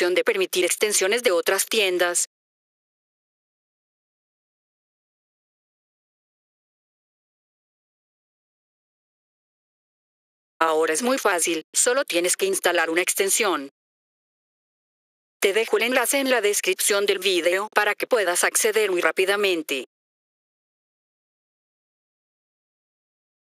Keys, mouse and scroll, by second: 3.2 click, 4.9 click, 5.5 click, 6.4 click, 7.8 click, 10.0 F4, 10.5 click, 13.3 click, 15.8 click, 17.3 scroll down 2, 18.4-18.9 scroll up 5, 19.9 F4, 23.0 ctrl+Num_Lock.